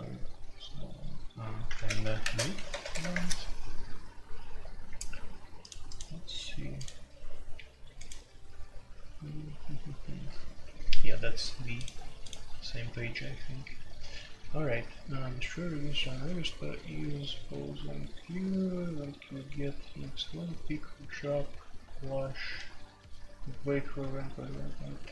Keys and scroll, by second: 1.7-3.1 typing.